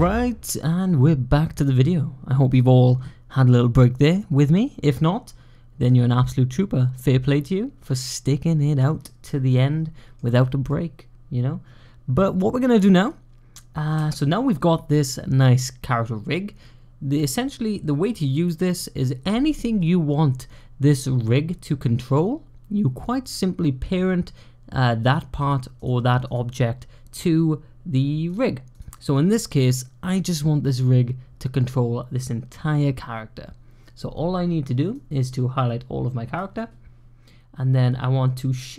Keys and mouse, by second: 9.1-10.0 middle drag, 10.5-13.7 middle drag, 25.3 click, 26.2 click, 34.9-36.2 drag.